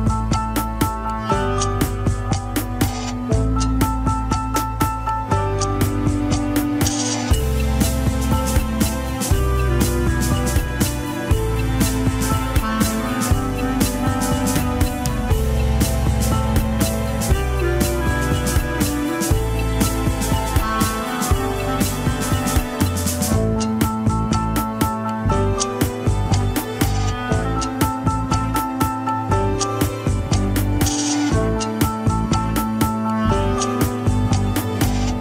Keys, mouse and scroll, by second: 1.6-2.6 middle drag, 2.6 ctrl+click, 2.7-3.9 shift+middle drag, 3.9-5.3 drag, 5.3 middle click, 6.2 click, 7.0-8.5 middle drag, 8.5 click, 8.8-10.1 middle drag, 10.1 ctrl+click, 10.6 shift+middle click, 11.2-13.0 drag, 13.0 shift+middle click, 13.7-14.8 drag, 15.2-16.9 drag, 17.3-18.6 drag, 18.6 KP_1, 18.7 scroll down 2, 18.9 ctrl+Tab, 19.7 shift+z, 20.1 shift+z, 20.5 click, 21.5 ctrl+Tab, 21.8 a, 22.3 alt+g, 22.8 click, 23.6 g, 25.9 click, 27.0 g, 28.4 click, 29.1 g, 29.8 click, 30.6 g, 32.0 middle click, 32.9-33.3 scroll down 1, 33.3 ctrl+Tab, 33.5 shift+click, 33.8 ctrl+Tab, 34.6 alt+z.